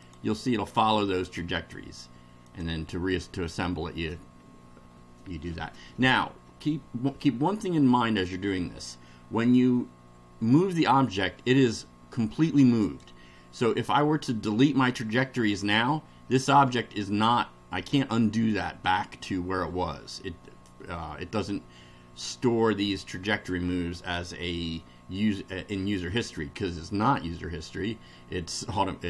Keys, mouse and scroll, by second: 0.0 click, 2.5 click, 7.4-8.4 middle drag, 12.8 click.